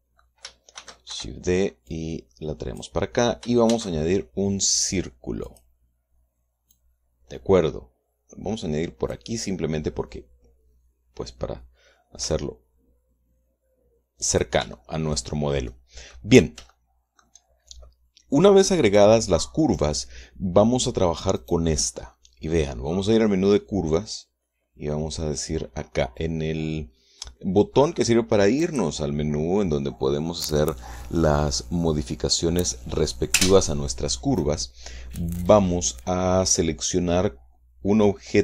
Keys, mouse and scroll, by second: 0.1 click, 0.8-2.2 shift+middle drag, 1.2 shift+d, 1.6 shift+Escape, 2.4-3.4 drag, 4.2 shift+a, 6.0 click, 7.2-9.8 drag, 12.7 s, 14.8 click, 15.2 shift+middle click, 16.2 middle click, 17.1 shift+middle click, 21.9 click, 29.1 click.